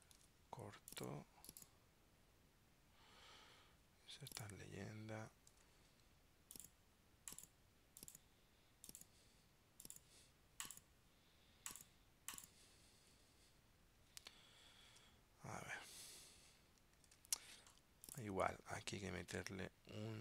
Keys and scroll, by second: 0.3 super+x, 5.7 super+v, 15.1 super+Tab, 17.2 super+Tab.